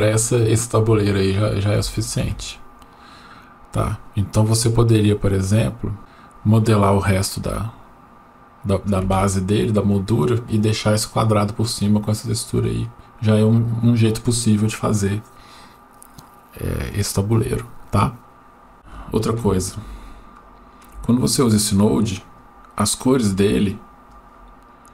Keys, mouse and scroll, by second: 18.9-19.4 shift+scroll up 1, 20.0 shift+middle click, 21.4 click, 21.7 click, 22.9 click.